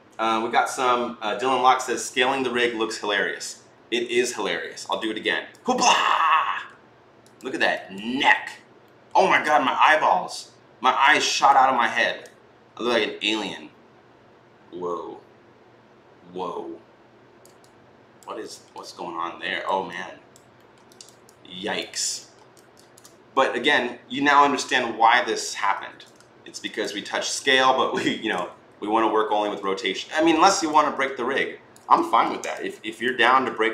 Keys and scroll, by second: 4.7 t, 25.5 ctrl+z, 28.4-29.9 typing, 31.9 ctrl+z.